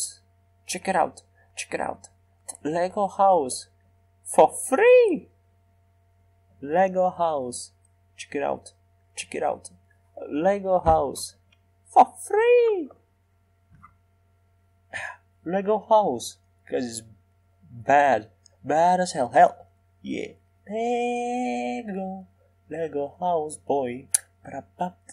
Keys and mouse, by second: 1.2-4.0 middle drag, 6.4-7.5 drag, 8.4-10.8 drag, 10.8 shift+d, 16.0-17.8 drag.